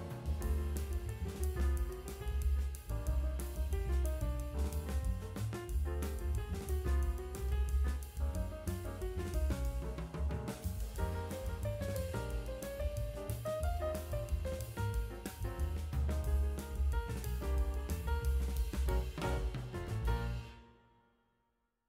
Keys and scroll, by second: 6.9 [, 7.3 4, 19.0 space, 19.5 ctrl+space, 20.5-21.5 typing.